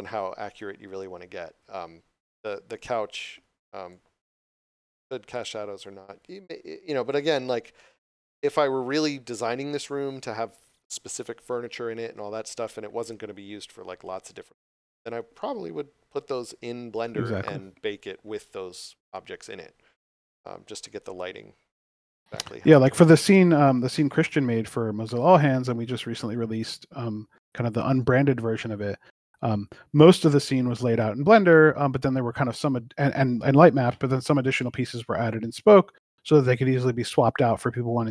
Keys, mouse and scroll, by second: 2.7 click, 5.5 scroll down 1, 7.0 scroll up 1, 7.1 click, 8.6 scroll down 1, 27.1 click, 29.1 click, 33.3 click.